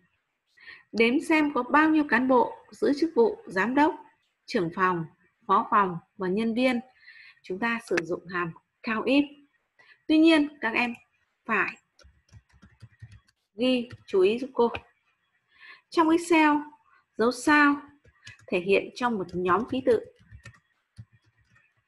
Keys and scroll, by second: 12.3-14.1 typing, 17.7-21.8 typing.